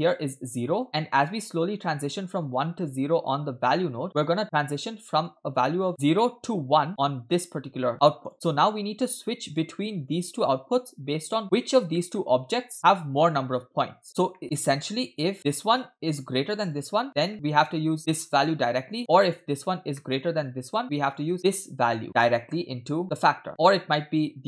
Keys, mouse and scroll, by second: 0.1 click, 1.5-4.4 drag, 5.3 click, 6.9 click, 8.3 click, 9.1 click, 10.1-11.4 drag, 11.4 middle click, 11.4-12.0 scroll down 3, 12.0 middle click, 12.8 middle click, 13.2 click, 14.3 middle click, 14.7-15.3 scroll up 1, 15.4 click, 16.7 click, 17.3 middle click, 18.2-19.0 drag, 19.5 click, 20.0 middle click, 20.9 click, 20.9 middle click, 21.5-23.5 drag, 23.5 middle click.